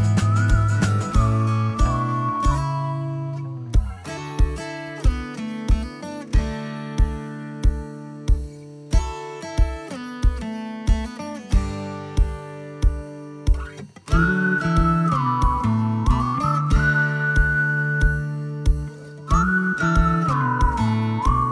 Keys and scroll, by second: 16.5 Delete, 17.4 ctrl+s.